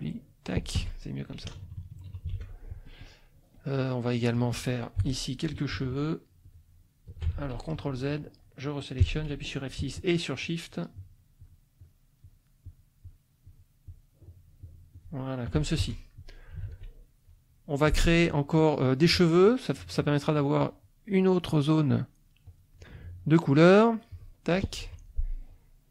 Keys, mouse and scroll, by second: 0.7 F1, 1.5 KP_Subtract, 2.3 ctrl+s, 3.5 middle click, 4.1 middle click, 5.0 F6, 6.4 shift+click, 7.3 ctrl+shift+z, 7.9 ctrl+shift+F2, 8.1 ctrl+shift+click, 9.0 F6, 10.4 shift+click, 10.9 shift+click, 11.4 shift+click, 11.8 shift+click, 12.2 shift+click, 12.6 shift+click, 13.0 shift+click, 13.4 shift+click, 13.9 shift+click, 14.2 shift+click, 14.6 shift+click, 15.0 shift+click, 15.8 shift+F1, 16.0 shift+middle click, 16.6 ctrl+shift+s, 16.8 ctrl+shift+click, 17.2 ctrl+shift+middle click, 22.5 click, 24.1 click, 24.8 F2.